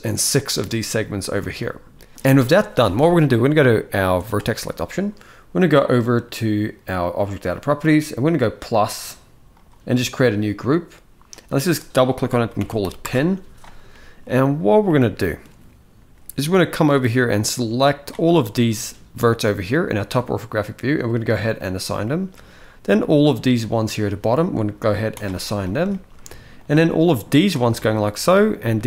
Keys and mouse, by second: 1.1 alt+a, 6.7 click, 8.1 click, 9.2 click, 11.1-12.7 drag, 13.6 shift+middle click, 14.6 shift+middle click, 14.8 shift+middle click, 16.5-17.7 drag, 18.2 shift+middle click, 21.0 click, 21.7 shift+middle click, 22.9 click, 24.9 click, 25.6 shift+middle click, 26.4 click, 28.1 shift+click.